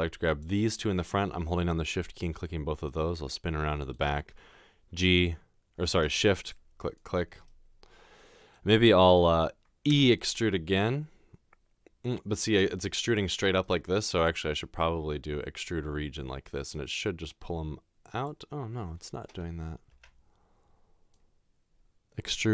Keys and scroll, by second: 9.9 e, 20.0 ctrl+z.